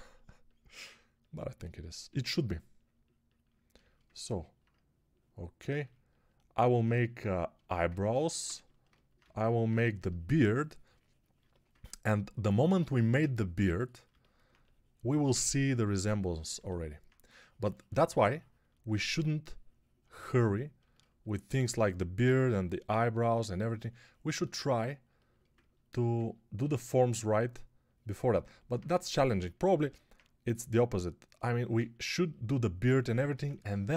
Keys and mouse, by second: 9.1 x, 21.4 1, 22.1 x, 24.9-26.2 alt+shift+middle drag.